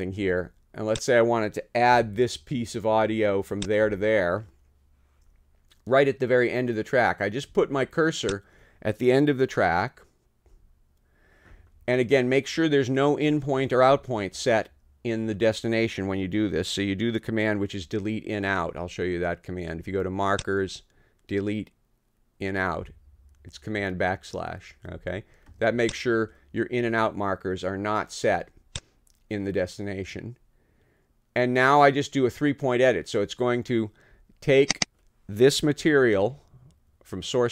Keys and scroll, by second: 2.0 [, 3.8 ], 10.5 n, 35.8 t.